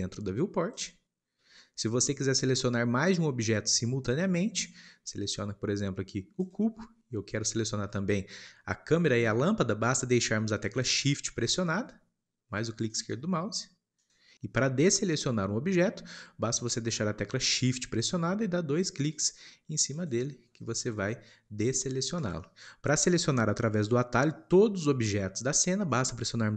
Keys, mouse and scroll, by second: 6.4 click.